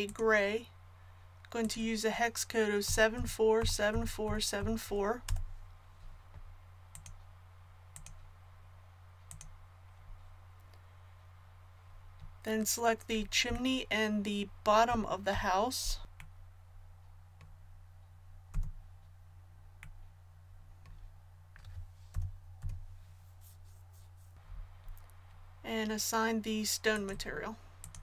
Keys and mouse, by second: 0.0-1.9 drag, 6.9-8.7 drag, 16.0 ctrl+z, 18.5 a, 22.1 l, 22.6 l, 26.9-28.0 drag.